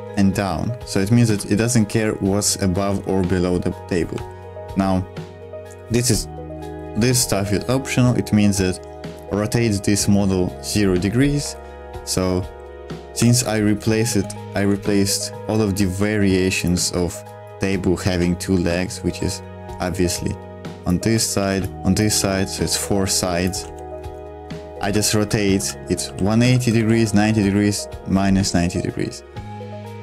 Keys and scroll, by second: 0.0-2.8 typing, 4.1 l, 6.3-7.1 typing, 11.4 Escape, 11.5-13.2 typing, 14.3 super+2, 18.1 ctrl+z, 21.4 ctrl+z, 22.1 ctrl+z, 23.6 ctrl+z, 23.9 super+1, 24.8 Escape, 25.2-27.6 typing, 29.4-30.0 typing.